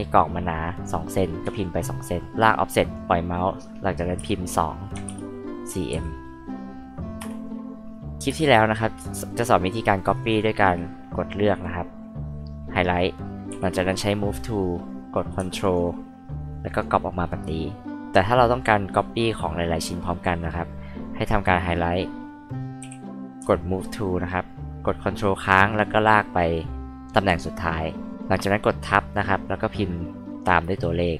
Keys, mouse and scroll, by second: 1.4 KP_2, 2.3-2.9 drag, 4.1-5.9 typing, 7.2 Return, 8.3 space, 10.0 click, 10.1 click, 10.3 click, 11.6 click, 13.5 m, 15.6 ctrl+click, 16.7 ctrl+click, 19.8-21.7 drag, 22.8 m, 25.3 ctrl+click.